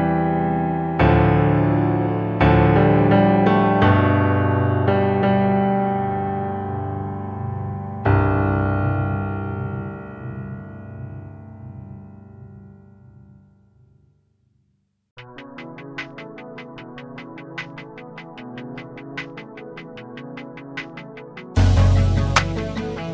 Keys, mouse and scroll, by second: 0.2 scroll up 3, 0.6 click, 1.4 s, 3.0 drag, 3.4 scroll down 1, 3.6 click, 4.4-5.0 shift+middle drag, 5.0 click, 6.6 Delete, 7.1 click, 7.9 shift+d, 9.8-11.1 shift+middle drag, 11.1 shift+c, 11.6 scroll up 6, 11.9-13.3 shift+middle drag, 13.3 shift+s, 14.9 click, 15.1 scroll down 1, 15.4-17.0 middle drag, 17.0 click, 17.7 KP_Decimal, 18.4-18.9 middle drag, 18.9 click, 19.1-20.1 middle drag, 20.1 click, 21.2 KP_1, 22.1-22.5 scroll up 1, 22.5 s.